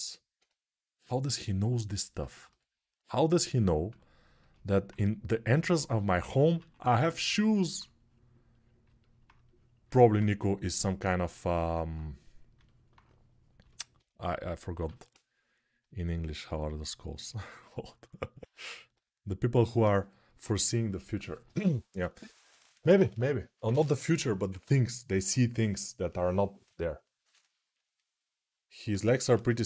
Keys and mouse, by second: 2.2 g, 2.8-29.6 drag, 6.3 1, 14.5 6, 18.7 g.